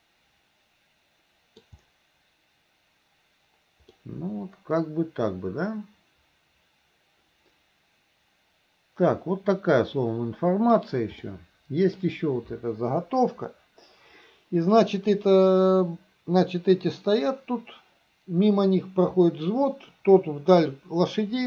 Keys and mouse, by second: 4.0-10.8 middle drag, 11.3 middle click.